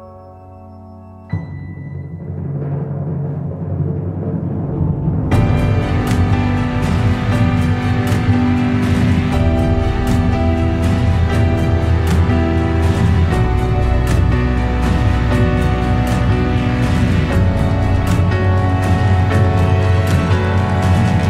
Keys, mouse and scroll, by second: 11.9-21.2 drag.